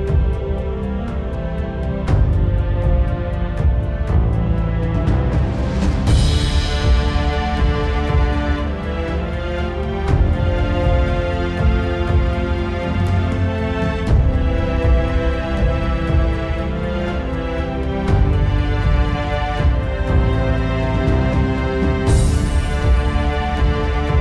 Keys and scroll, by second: 6.4 z, 6.8 z, 24.0 z.